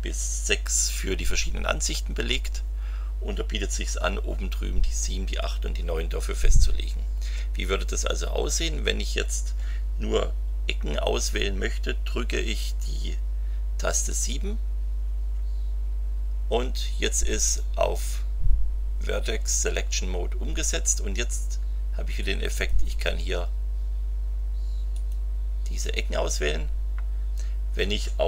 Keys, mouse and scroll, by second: 14.1 KP_7, 22.5 click, 24.9 click.